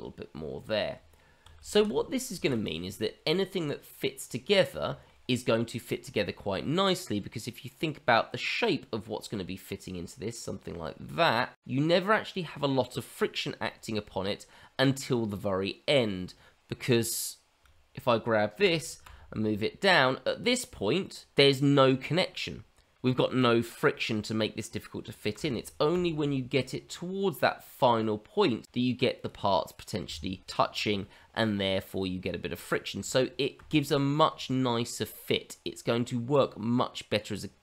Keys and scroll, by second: 0.9 Tab, 1.7 shift+z, 2.4 shift+z, 18.5 g, 25.3 g, 33.1 ctrl+z, 33.7 ctrl+z.